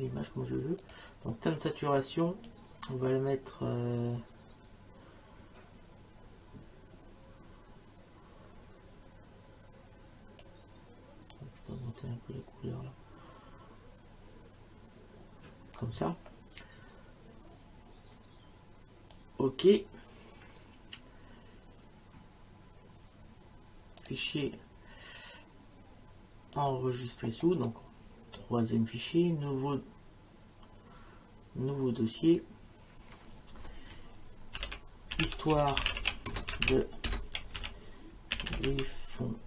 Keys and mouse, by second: 0.8 click, 2.5 click, 11.3 click, 19.1 click, 24.0 click, 26.6 click, 27.6 right click, 32.3 click, 34.6-39.0 typing.